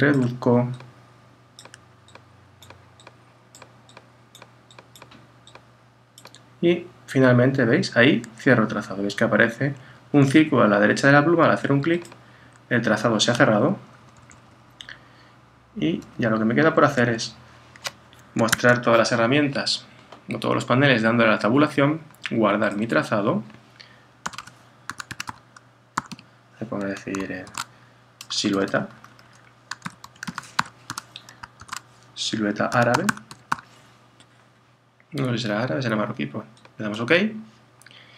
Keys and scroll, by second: 13.9 super+-, 18.5 Tab, 27.5 shift+_, 31.6 shift+space.